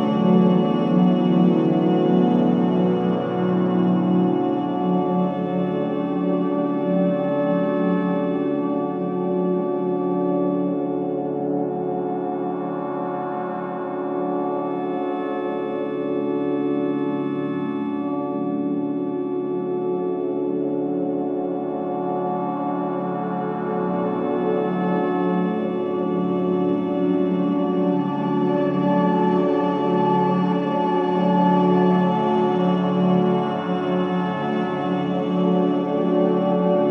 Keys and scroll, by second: 1.4 3, 4.5 4, 5.1 2, 8.5 ctrl+z, 19.7 4, 23.9 3, 24.4 ], 27.0 ], 28.4 ], 29.1 ], 30.7 ], 33.0 ], 34.8 4.